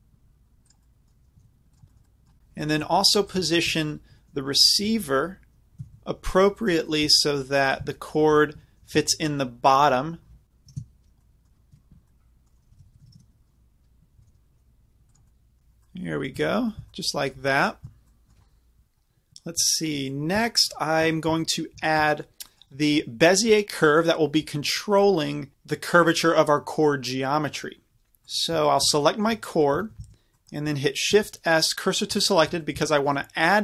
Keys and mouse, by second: 1.3 g, 1.8-2.4 drag, 3.4-4.7 right drag, 4.7-6.8 drag, 4.7 g, 8.8 r, 11.7 KP_Decimal, 12.7 r, 14.2 g, 16.0 click, 16.3-28.1 middle drag, 28.3-31.1 drag, 30.0 z, 31.1 shift+s.